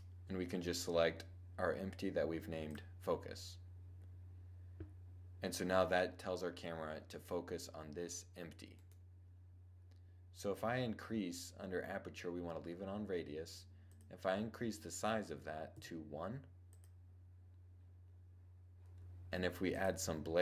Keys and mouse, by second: 6.8-10.3 right drag, 13.5-16.2 drag, 19.4-20.4 drag.